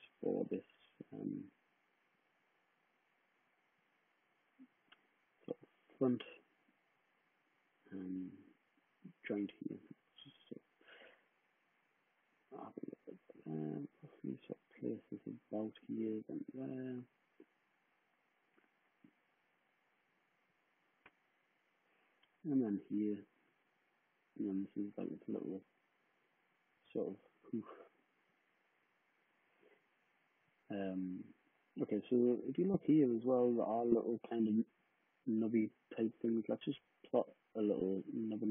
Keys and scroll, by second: 28.3 w.